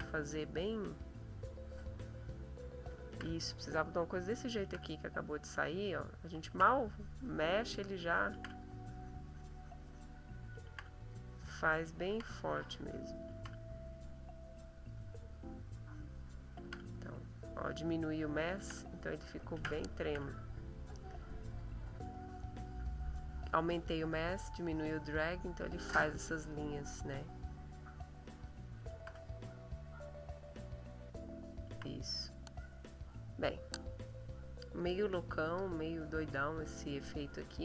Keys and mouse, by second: 1.0 click, 2.0 click, 3.0 ctrl+z, 4.6 ctrl+z, 5.4 click, 6.5 ctrl+z, 6.9-8.1 ctrl+drag, 8.3 ctrl+z, 8.6-10.2 ctrl+drag, 10.6 ctrl+z, 11.0 ctrl+click, 12.1 ctrl+z, 12.4 ctrl+click, 13.4 ctrl+z, 14.5 click, 15.4-16.6 drag, 16.6 ctrl+z, 16.9-18.6 ctrl+drag, 18.6 ctrl+z, 18.8-20.0 ctrl+drag, 20.0 ctrl+z, 20.8-21.4 drag, 22.2-28.8 drag, 28.9 ctrl+z, 32.0 ctrl+middle click, 34.7 click, 35.4 click, 36.2 click, 37.0 click.